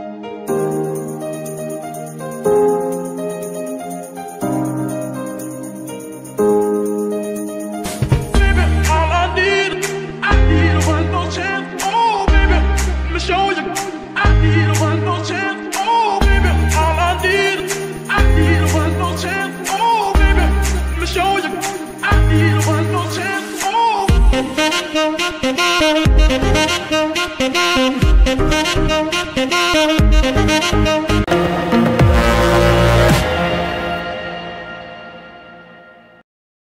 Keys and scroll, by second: 2.2 Escape, 5.0 g, 8.8 Escape, 10.0 x, 12.2 Escape, 15.1 g, 18.4 Escape, 21.4 r, 29.1 f, 29.2 r, 30.5 Escape.